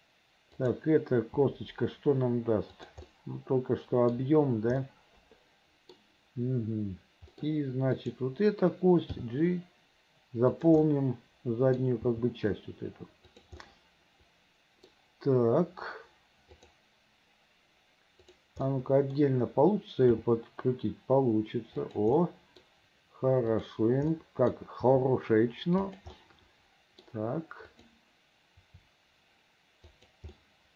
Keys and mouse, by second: 0.7 click, 1.5 g, 3.2 click, 3.4 middle click, 5.0-6.1 middle drag, 8.1 click, 9.2 g, 11.0 middle click, 12.2 g, 13.9-15.0 middle drag, 16.7 click, 18.8 middle click, 20.3 r, 22.3 click, 23.7 click, 24.3 click, 24.6-26.0 middle drag, 24.9 r, 26.4 click, 27.9 click, 28.7 r, 30.6-30.7 middle drag.